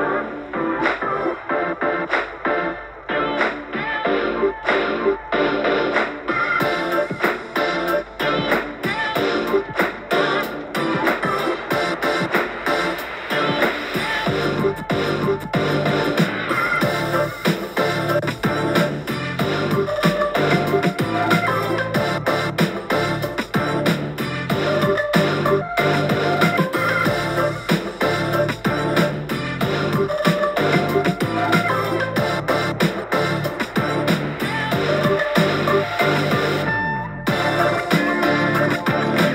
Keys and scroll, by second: 3.2 super+t, 8.8 super+t, 13.1 super+t, 13.3-13.7 Page_Up, 13.7 Page_Up, 14.6 Page_Up, 14.7 Page_Up, 17.4-19.0 typing, 23.5 super+z, 30.4 x, 31.6 super+z, 31.7 super+z.